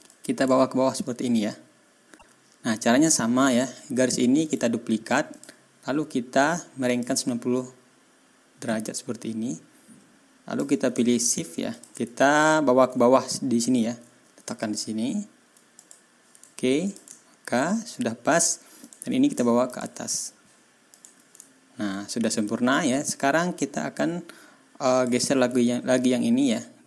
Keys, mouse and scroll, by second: 0.0-2.1 drag, 2.3-2.6 ctrl+scroll up 2, 3.2 ctrl+scroll down 2, 3.9 click, 4.4 right click, 5.3 click, 6.8 click, 8.6-10.7 drag, 11.7 shift+click, 12.3-12.8 ctrl+shift+scroll up 5, 13.7 ctrl+scroll up 2, 15.7 middle click, 16.8 ctrl+middle click, 17.2-17.6 ctrl+scroll up 2, 17.6-18.3 ctrl+scroll down 2, 18.8 click, 19.6 shift+click, 20.9 click, 21.4 ctrl+scroll down 2, 22.2 ctrl+click, 22.6 ctrl+scroll up 2, 24.9 click, 25.7 ctrl+scroll down 2.